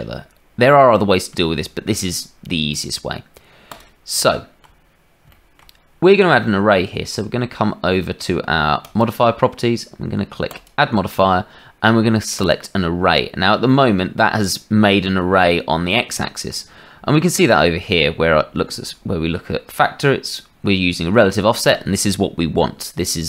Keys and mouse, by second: 2.7 click, 3.6 click, 13.6 middle click.